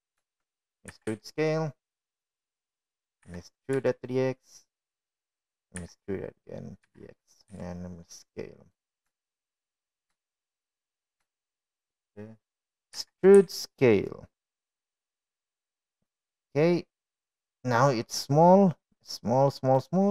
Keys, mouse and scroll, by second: 0.6 middle click, 1.8 ctrl+z, 2.8 middle click, 3.9 e, 6.3 e, 8.8 e, 10.5 s, 12.1 shift+middle click, 13.2 shift+middle click, 14.3 shift+middle click, 16.0 e.